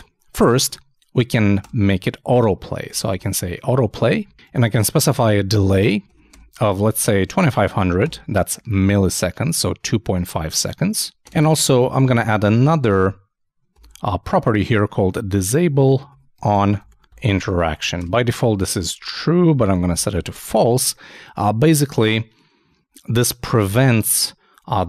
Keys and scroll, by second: 5.7-6.5 typing, 14.0 shift+e, 15.8-18.2 typing.